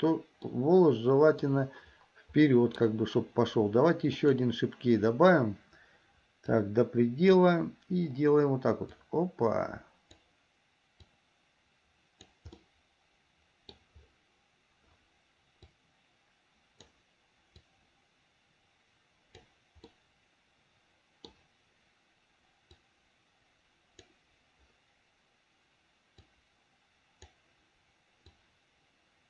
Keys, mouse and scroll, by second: 0.6 middle click, 2.6 middle click, 4.2 click, 6.7 click, 9.1-10.4 drag, 11.2-12.5 drag, 12.8-14.0 middle drag, 15.8-17.1 drag, 17.7-19.6 drag, 20.1-21.5 middle drag, 22.9-24.3 drag, 26.4-27.6 drag, 28.4-29.2 drag.